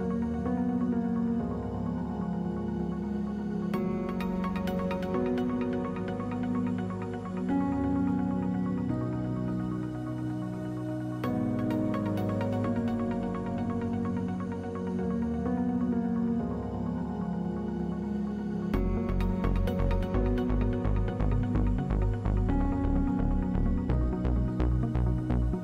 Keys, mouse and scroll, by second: 8.6 g, 9.1-10.7 middle drag, 11.2 f, 13.2 ctrl+z, 18.8-20.9 middle drag, 20.9 click, 21.1 alt+q, 21.5 click, 22.4-23.8 middle drag, 24.8-25.6 drag, 25.1 ctrl+z.